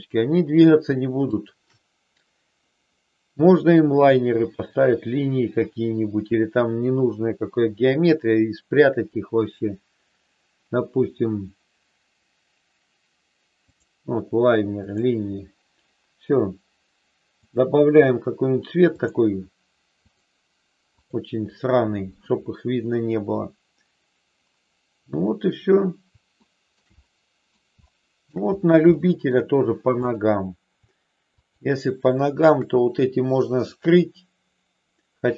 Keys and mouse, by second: 0.0 click, 1.3 shift+click, 3.3-13.8 drag, 14.7 click, 17.3 click, 19.0-20.2 drag, 21.1 click, 26.3 shift+middle click, 27.0 middle click, 27.8 shift+middle click, 28.8 shift+middle click, 31.2 shift+click, 33.8-35.3 drag.